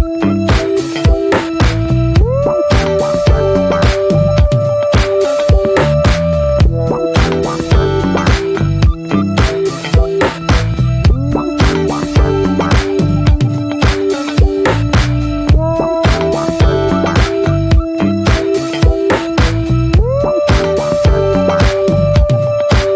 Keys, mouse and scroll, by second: 1.2-3.1 drag, 3.1-3.6 scroll down 3, 3.3 middle click, 3.6 middle click, 3.7 scroll up 1, 4.0 scroll down 1, 4.2-5.6 middle drag, 5.6-5.9 scroll up 1, 6.2 shift+middle click, 6.3-8.6 scroll up 5, 6.6 shift+middle click, 6.9 shift+middle click, 8.6-11.0 drag, 12.9-16.4 drag, 18.5-21.8 drag.